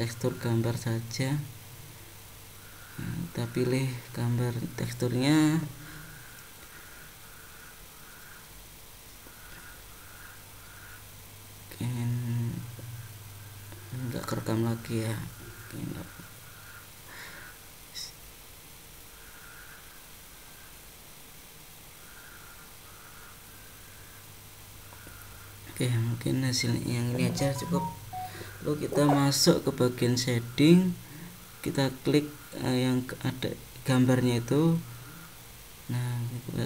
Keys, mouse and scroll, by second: 0.3 click, 3.9 click, 25.9 click, 33.8 ctrl+t.